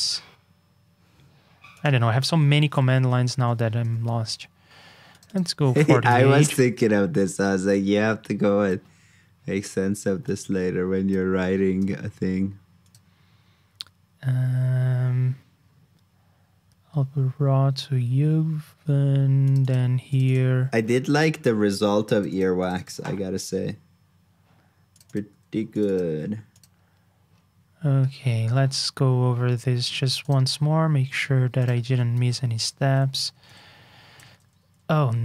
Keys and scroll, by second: 2.7 super+v, 23.0 super+c, 26.0 super+v, 32.1 super+c, 32.5 super+j, 34.2 super+h.